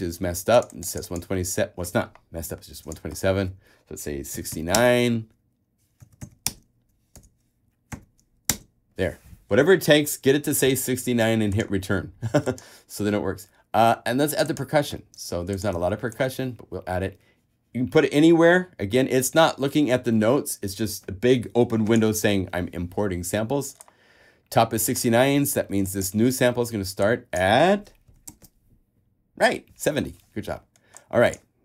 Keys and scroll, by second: 4.3-8.1 typing, 16.0 super+a, 28.0-29.0 typing.